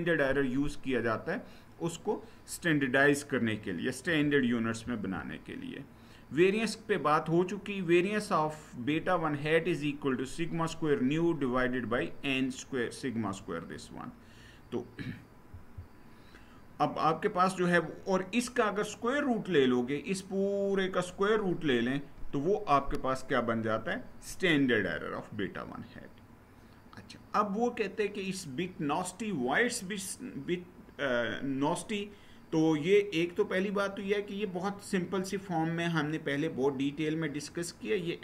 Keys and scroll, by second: 4.6 Down, 15.3 Down.